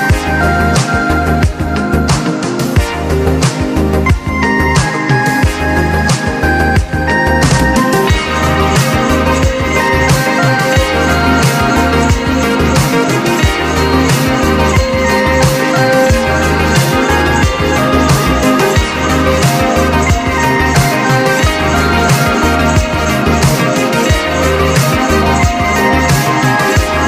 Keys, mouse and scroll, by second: 1.9 click, 3.0 click, 4.1 click, 8.5 click, 9.8 click, 10.6 scroll down 1, 11.3 click, 12.8 click, 13.5-14.3 scroll up 1, 14.3 click, 14.5 click, 16.3 click, 18.7 click, 20.9 click.